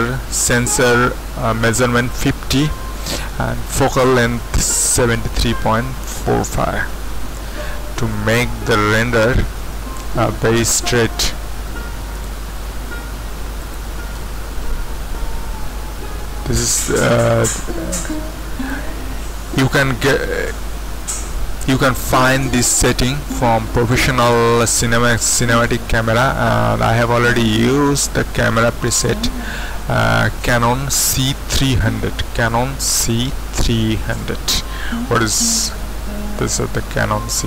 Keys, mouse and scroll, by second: 7.4 q, 10.6 z, 18.1 click, 28.6 click.